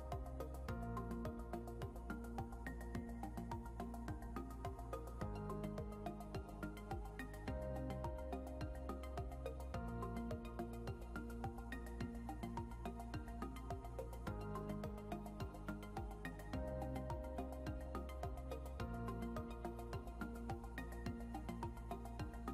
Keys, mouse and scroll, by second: 16.8 scroll up 1.